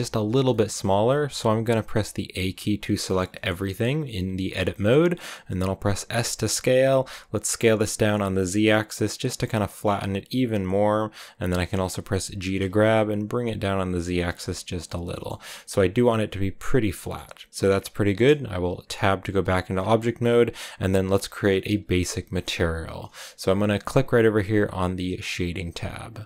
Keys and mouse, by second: 0.6 click, 2.3 a, 3.0 click, 3.3 shift+click, 3.5 a, 3.7 a, 4.7 click, 6.0 s, 6.7 z, 10.9 click, 11.3 g, 12.4 z, 14.0 shift+click, 14.8 Tab, 15.0 click, 15.3 a, 15.3-17.1 drag, 17.5 Tab, 17.5 click, 19.9 click, 20.8 click, 21.8 click, 22.2 shift+click.